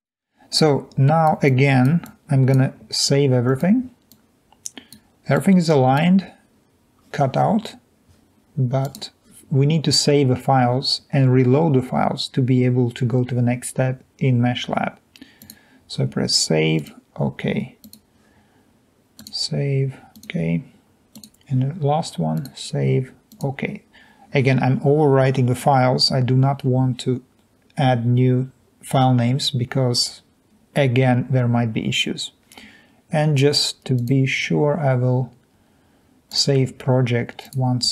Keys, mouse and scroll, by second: 0.7 click, 1.6 click, 2.0 click, 16.8 click, 23.3 click.